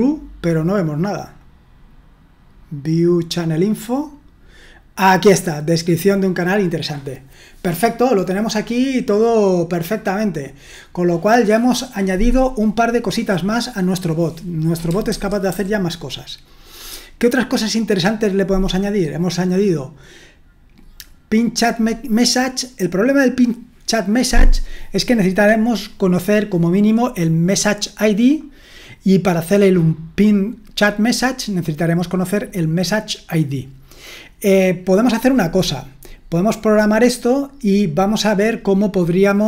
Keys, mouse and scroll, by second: 15.1 super+1, 15.5 super+2.